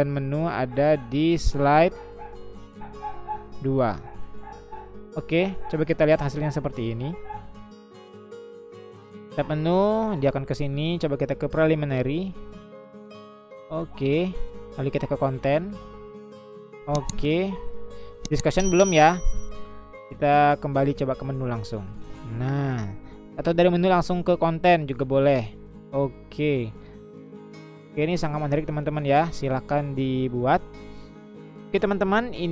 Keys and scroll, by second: 31.7 Escape.